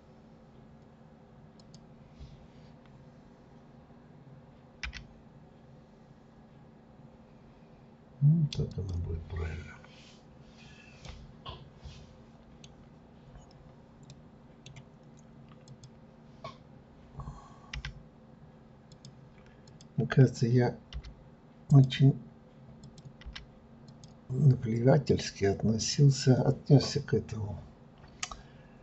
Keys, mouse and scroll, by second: 1.6 click, 9.3-10.3 scroll down 1, 11.0-13.1 middle drag, 13.1-14.1 scroll up 3, 14.1-15.6 middle drag, 15.6 click, 17.8 g, 19.7 click, 20.9 g, 22.8 click, 23.2 g, 25.8 click.